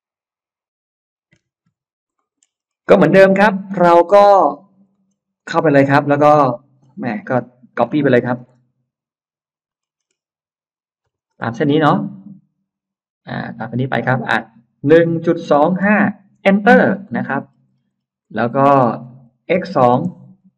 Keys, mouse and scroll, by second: 1.2 F9, 1.6 scroll up 1, 2.0 middle click, 2.4-3.6 scroll up 4, 4.2 click, 4.8 middle click, 5.0 scroll up 2, 5.2 click, 5.4 click, 5.8 click, 6.1 middle click, 6.7 scroll down 1, 7.0-7.3 scroll up 1, 9.6 scroll up 1, 9.8 middle click, 10.0 middle click, 10.8 click, 11.1 ctrl+middle click, 14.6-16.2 typing, 16.6 Return, 17.2 middle click, 18.0 middle click, 19.2-20.5 typing.